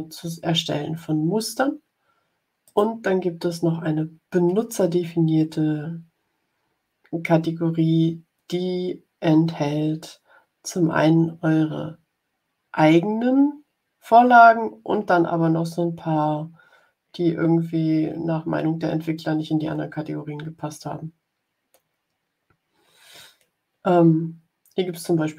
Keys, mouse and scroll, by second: 2.5 click.